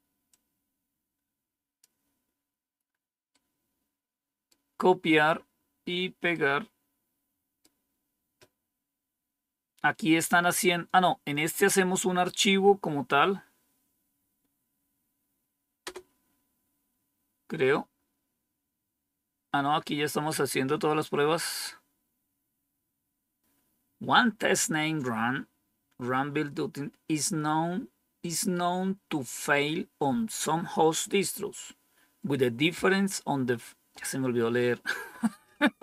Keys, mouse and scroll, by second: 0.2 click, 3.2 right click, 6.3 right click, 15.7 Return.